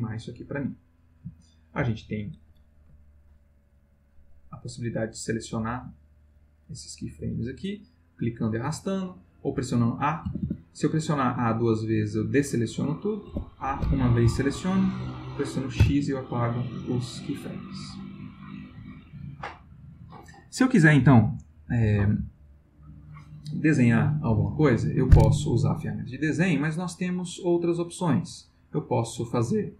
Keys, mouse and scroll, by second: 1.2 space, 4.6-6.5 drag, 8.3-9.1 drag, 10.3 a, 13.3 a, 15.8 Delete, 16.3 click, 17.0 click, 18.9-23.3 middle drag, 28.8 click, 29.5 click.